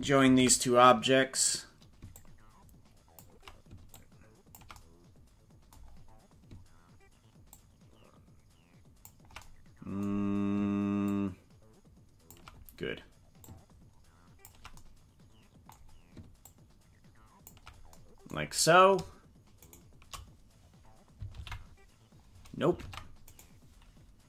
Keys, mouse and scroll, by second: 0.3 ctrl+j, 2.1-3.2 ctrl+drag, 3.8 ctrl+click, 5.8-6.1 scroll down 3, 7.4-9.1 ctrl+drag, 11.1-12.3 ctrl+drag, 13.5 ctrl+click, 16.5-17.5 ctrl+drag, 19.6 shift+right click, 21.3 ctrl+p, 22.8 ctrl+Tab, 23.3 right click.